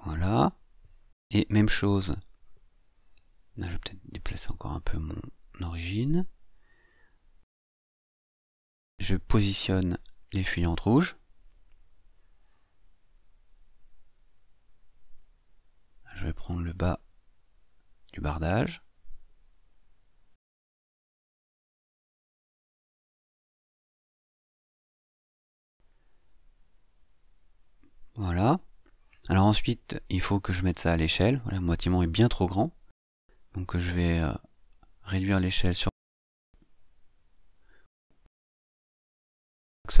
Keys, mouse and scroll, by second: 3.8-7.2 drag, 9.3-11.2 drag, 12.0-13.5 drag, 14.0-15.8 drag, 17.5-21.6 drag, 22.7-28.6 drag, 29.0-30.5 scroll down 6, 30.9 scroll down 1, 31.4-31.7 scroll down 2, 32.0 scroll down 2, 32.3 middle click, 34.4-36.2 scroll down 3, 39.6-40.0 drag.